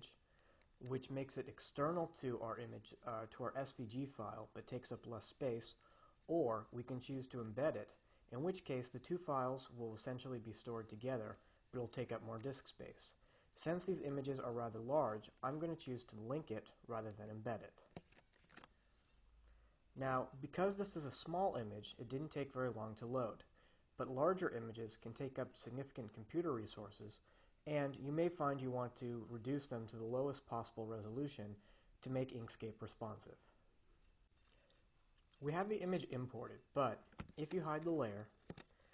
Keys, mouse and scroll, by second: 18.4 click.